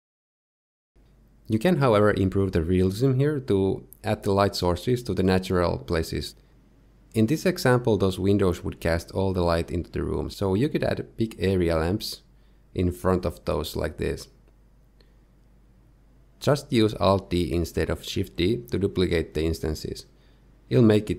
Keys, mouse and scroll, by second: 0.1 shift+middle click, 0.3 middle click, 0.7 Tab, 0.7 shift+right click, 0.7 scroll down 2, 0.7 shift+a, 1.0 shift+a, 4.3 scroll down 1, 4.7 middle click, 5.7 KP_1, 7.4 r, 9.1 middle click, 9.6-10.9 typing, 11.5 shift+middle click, 12.8 g, 15.4 middle click, 15.5 z, 15.7 shift+middle click, 16.1 alt+d, 20.2 shift+middle click, 20.3 middle click, 20.5 alt+f, 20.5 shift+middle click, 20.8 alt+d.